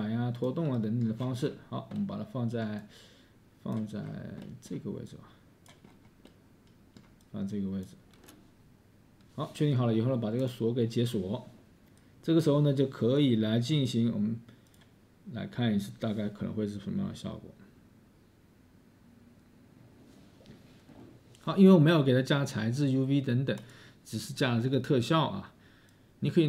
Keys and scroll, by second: 5.8 space, 6.3 space, 6.8 space, 7.3 space.